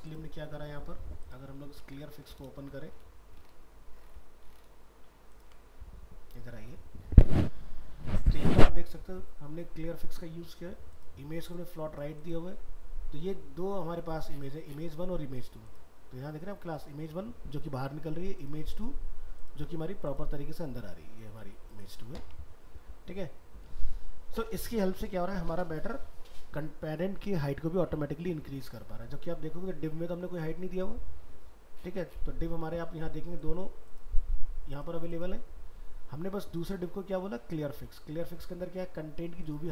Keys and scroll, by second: 2.1 ctrl+w.